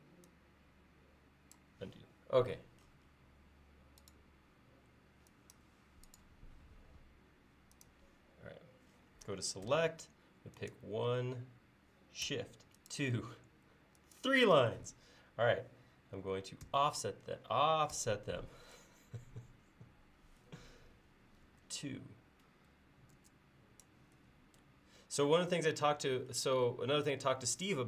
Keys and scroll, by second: 9.7 space, 16.7 s, 18.0 f, 21.5 2, 23.2 Return.